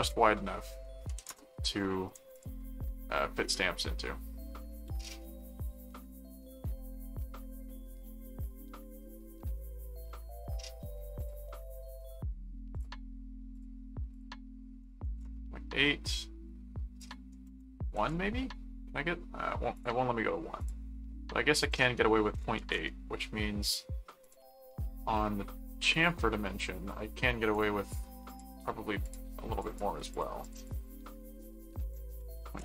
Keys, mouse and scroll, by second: 2.3 click, 3.6-6.9 middle drag, 8.1 middle click, 10.0 middle click, 11.2 click, 12.7 click, 13.5 click, 17.0 click, 19.7 click, 20.6 click, 21.6 click, 24.2 click, 25.9 click, 27.5 click, 28.3 click, 29.0-31.1 drag, 31.7 click.